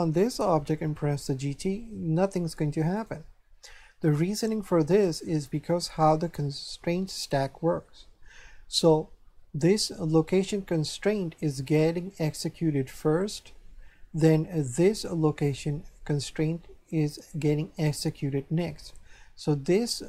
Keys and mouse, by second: 0.0 right click, 1.2 g, 2.9 right click, 4.5 right click.